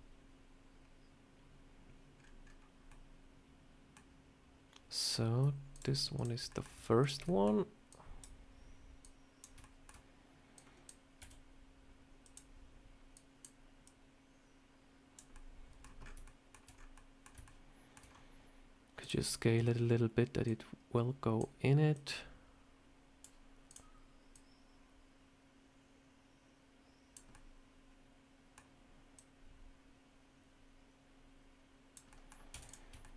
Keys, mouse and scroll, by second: 4.9 click, 5.6 shift+click, 6.4 middle click, 6.9 shift+click, 7.1 middle click, 7.8 click, 8.9 click, 9.5 shift+middle click, 10.4 click, 11.1 s, 13.0 click, 13.7 click, 15.2 middle click, 15.9 scroll up 4, 16.1 shift+middle click, 16.6 scroll up 3, 16.8 middle click, 17.3 shift+middle click, 17.9 scroll down 2, 18.9 click, 20.3 click, 21.8 click, 23.6 click, 24.2 click, 27.2 middle click, 29.0 click, 32.0 middle click, 32.4 Tab, 32.5 click, 32.9 shift+middle click, 33.1 Tab.